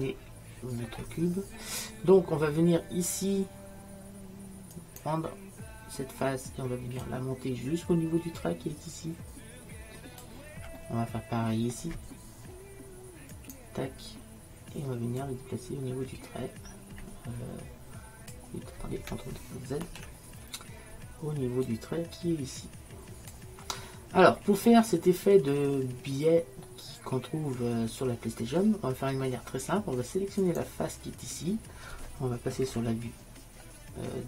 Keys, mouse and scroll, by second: 3.6-4.8 middle drag, 4.8-6.5 drag, 6.5 right click, 7.1-9.0 drag, 9.0-10.9 middle drag, 11.0 middle click, 13.4-15.3 right drag, 15.3-17.6 drag, 19.9 ctrl+z, 21.7-24.4 drag, 24.4-27.2 middle drag, 27.7 middle click, 30.5-32.7 right drag.